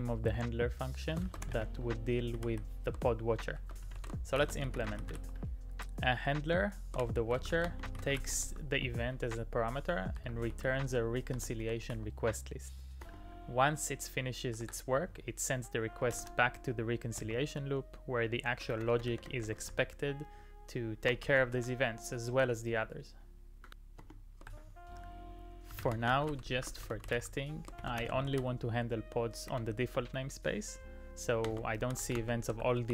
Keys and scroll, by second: 1.0-5.7 typing, 7.1-9.0 typing, 10.2-10.5 typing, 11.4 Return, 11.8 shift+0, 14.5 [, 14.6 ], 15.8-17.2 typing, 18.7 shift+Tab, 18.9 shift+Tab, 19.1 shift+Tab, 19.3 shift+Tab, 21.2 shift+r, 21.5 e, 22.4 Tab, 24.0 space, 24.5 shift+[, 25.5-28.8 typing, 29.5 Tab, 29.9 Return, 31.2-32.9 typing.